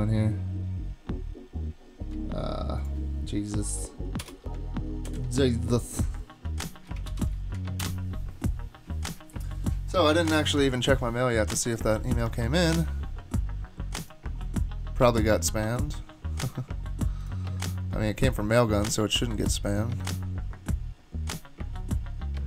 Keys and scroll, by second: 3.7 Delete, 4.0-4.7 typing, 5.1 super+s, 7.1 super+k, 7.8 Return.